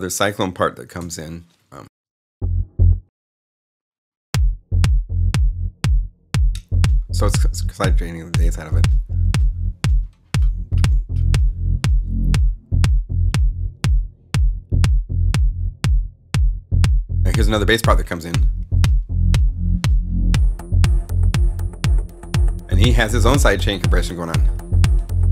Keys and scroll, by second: 0.9 alt+shift+s, 1.7 alt+space, 2.2 space.